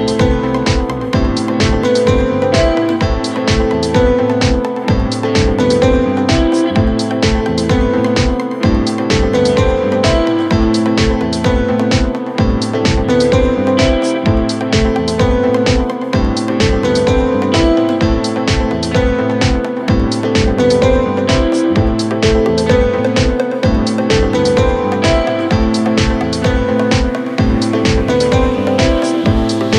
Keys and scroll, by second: 3.1-4.2 typing.